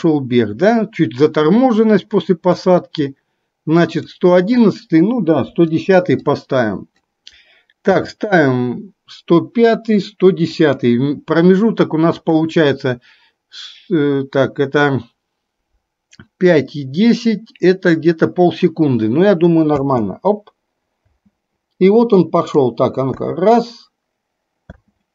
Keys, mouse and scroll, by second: 5.7 Delete, 8.1 g, 12.2-20.0 drag, 20.0 space, 21.3 space, 22.6-23.2 drag, 23.2 space, 25.0 space.